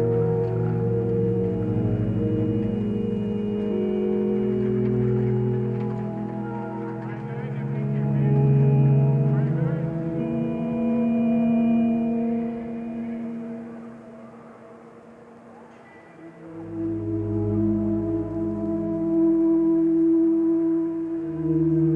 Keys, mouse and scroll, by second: 0.8 ctrl+space, 3.5 ctrl+t, 4.5 ctrl+;, 14.1 ctrl+;, 16.2 ctrl+space, 18.2 ctrl+z, 19.3 ctrl+space, 20.9 click.